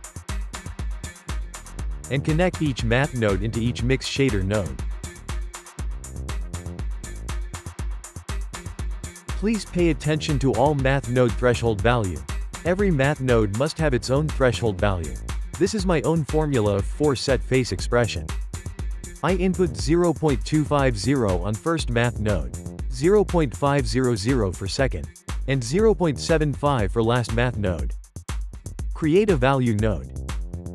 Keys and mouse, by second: 1.8 click, 3.6 click, 6.5-8.0 shift+middle drag, 8.8-9.9 ctrl+middle drag, 9.9 click, 10.6-14.0 ctrl+shift+middle drag, 16.8-17.9 shift+middle drag, 17.9-21.1 drag, 21.3 BackSpace, 24.0-27.1 drag, 27.3 click, 27.9 shift+a.